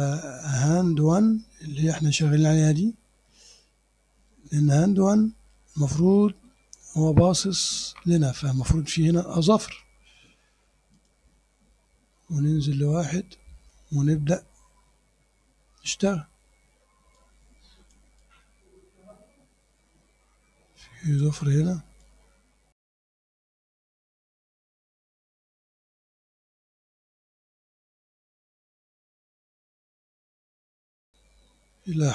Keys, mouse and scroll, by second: 1.0 click, 1.9 click, 2.3 click, 4.4-6.4 ctrl+drag, 6.4 ctrl+middle click, 6.4-7.1 ctrl+scroll up 2, 7.1 click, 11.0 click, 12.8 scroll down 1, 15.9 scroll up 1, 17.2 click, 18.2-21.4 drag, 22.1-23.5 drag, 23.6 scroll up 1, 23.9 click, 24.8 click, 25.3 click, 25.8 scroll up 1, 26.3 click, 27.1 click, 27.8-29.2 drag, 30.4 click, 30.6 click, 30.8-31.4 scroll down 2, 31.6 click, 31.9 scroll down 1.